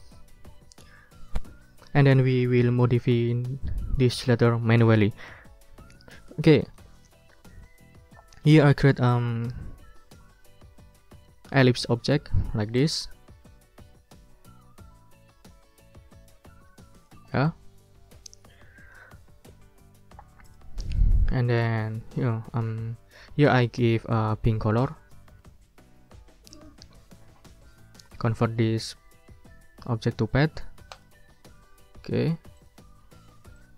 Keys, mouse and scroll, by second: 6.2-7.6 drag, 7.7 click, 9.1 ctrl+click, 9.6 ctrl+scroll up 2, 12.7 click, 17.1 click, 25.2 click, 26.5 right click, 30.9 click, 31.4 click, 31.9 ctrl+scroll up 1, 32.6 ctrl+click, 32.9 ctrl+click, 33.2 ctrl+scroll up 2.